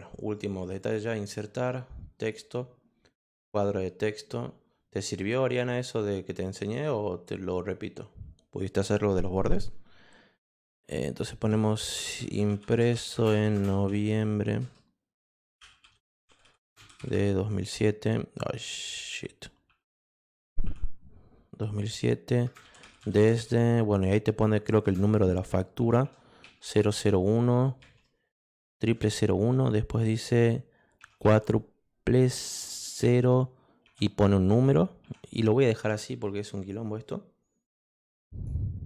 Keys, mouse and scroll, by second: 0.7 click, 2.2 click, 3.2 click, 5.9 click, 11.7-17.4 typing, 19.4-21.1 typing, 22.3-26.0 typing, 27.8 1, 28.9 -, 31.0 0, 31.2 0, 33.0 0, 34.2 4, 35.0 3, 38.1 click.